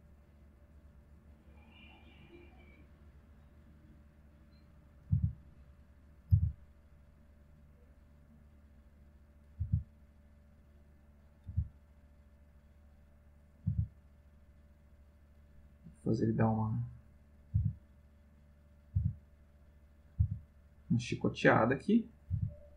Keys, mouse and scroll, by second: 0.2-3.4 drag, 4.2 click, 4.8 click, 5.1 r, 5.7 click, 6.2 click, 6.3 r, 6.9 click, 7.9 click, 9.2 click, 9.5 r, 10.6 click, 11.0 click, 11.3 click, 11.5 r, 12.3 click, 13.4 click, 13.7 r, 14.9 click, 15.7 click, 17.2 click, 17.6 r, 18.2 click, 18.7 click, 18.9 r, 19.5 click, 20.0 click, 20.2 r, 21.2 click, 22.1 click, 22.3 r.